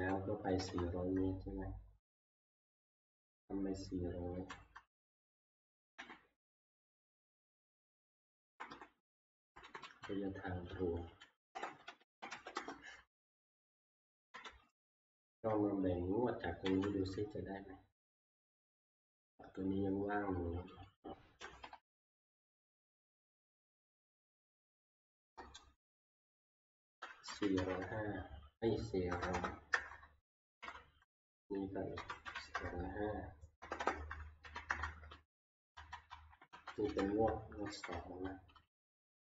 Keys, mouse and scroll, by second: 0.5 Left, 0.7 Left, 1.5 F2, 4.3-4.7 typing, 6.0 Delete, 6.9 Tab, 8.4 Left, 8.9 Left, 9.0 Left, 9.2 Left, 9.4 Left, 9.6 Left, 9.8 Left, 11.5-12.8 typing, 14.3 ctrl+Page_Down, 16.7 ctrl+Page_Down, 20.9 click, 21.7 ctrl+shift+Right, 23.1 ctrl+shift+Right, 23.9 ctrl+c, 25.2 Right, 26.0 Return, 26.1 Return, 27.6-30.2 typing, 30.6 Return, 32.0-38.2 typing.